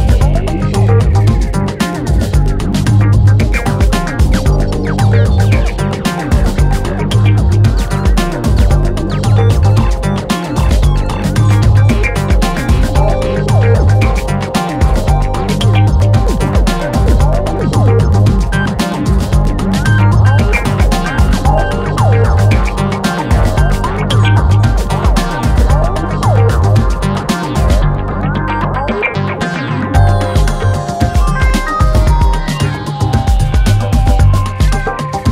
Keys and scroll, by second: 0.8 ctrl+d, 0.9 Escape, 2.8 4, 6.8 2, 17.5 F1, 18.5 Escape, 21.7 4, 24.6 F1, 29.8 3.